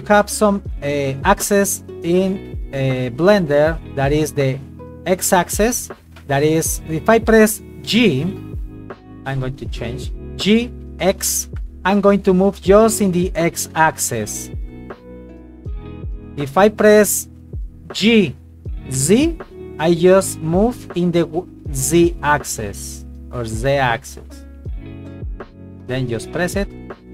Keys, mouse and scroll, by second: 1.4 shift+middle click, 2.6 right click, 3.0 g, 3.4 click, 6.0 right click, 8.5 right click, 9.3 click, 10.6 g, 11.1 x, 16.7 click, 18.0 g, 18.9 z, 26.3 click.